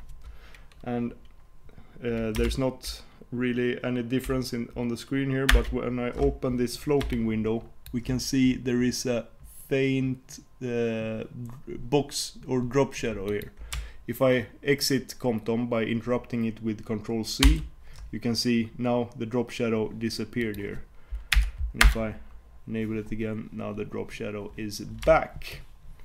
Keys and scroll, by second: 5.6 alt+super+Return.